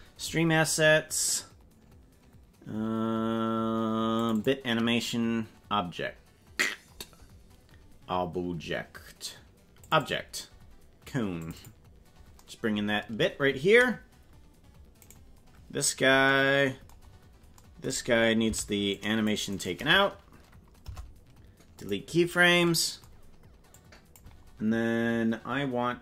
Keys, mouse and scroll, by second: 15.0 right click, 17.0-17.3 scroll down 6, 18.4 c, 20.9 Delete, 23.7 click.